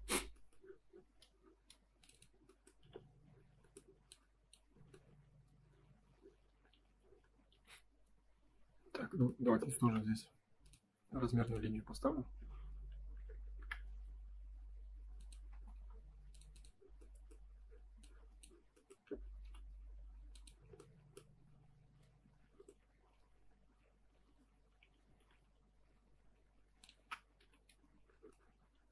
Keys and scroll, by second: 2.7 F3, 6.8 Escape, 13.5 Return, 15.5 space, 25.1 F3, 27.3 F4, 27.7 space.